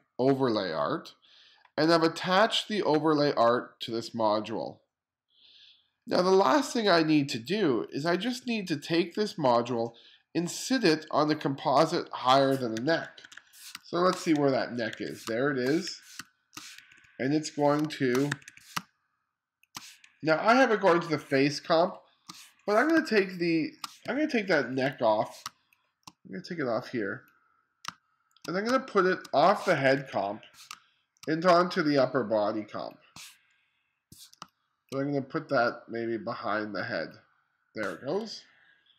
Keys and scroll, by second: 12.8-18.8 typing, 21.8 space, 23.0 space, 24.1 2, 25.0 1, 25.5 space, 27.9 space, 28.7 space, 30.0 2, 30.8 space, 34.5 space.